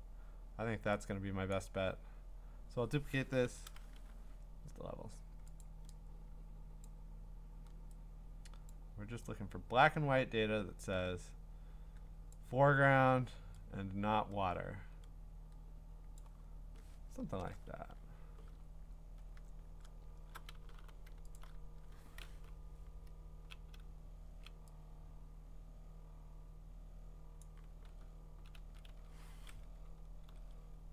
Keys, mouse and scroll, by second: 1.5 click, 3.4 ctrl+i, 5.6 click, 6.8 click, 12.3 click, 16.2 click, 17.2 Return, 18.6-20.0 scroll, 20.7 b, 21.4 alt+click, 22.5-23.5 ], 23.8-24.4 ], 27.4 click, 27.8-28.6 [, 28.9 [, 30.3 ctrl+z.